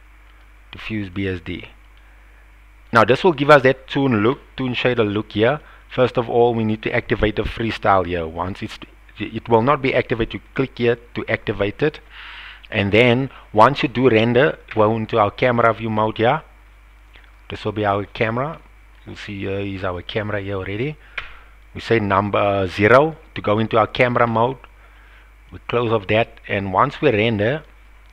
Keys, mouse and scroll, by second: 1.9-2.9 drag, 6.6 click, 10.5 click, 14.7 KP_0, 17.8 click, 18.5-18.9 middle drag, 20.0 click, 21.2 KP_0, 25.5 click, 26.9-27.8 drag.